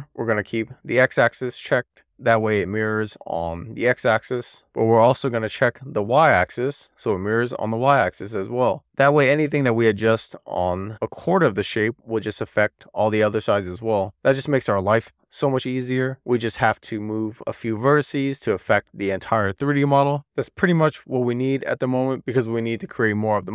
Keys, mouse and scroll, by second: 0.9 click, 1.8 middle click, 2.4 scroll down 2, 2.7 shift+middle click, 3.4-5.0 middle drag, 5.2 middle click, 6.8 click, 7.3 middle click, 9.3 alt+middle click, 10.2 shift+middle click, 10.8-11.8 scroll up 6, 11.8 shift+middle click, 12.7 Tab, 13.2 Tab, 13.9 alt+z, 15.1 alt+z, 15.9 alt+z, 16.5 alt+z, 17.2-18.2 scroll down 1, 19.9-20.7 scroll down 1, 20.7-21.2 scroll up 2, 21.2 alt+z, 22.3 alt+z, 22.9 alt+z, 23.2 click.